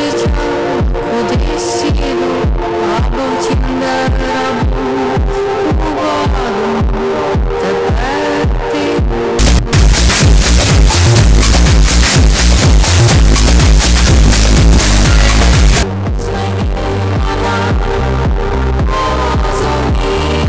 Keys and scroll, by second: 15.8 Page_Down.